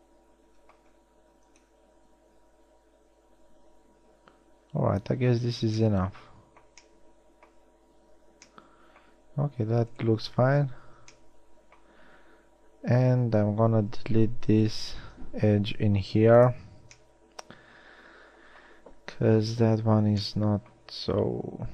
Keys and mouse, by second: 11.4-14.6 drag, 15.2 x.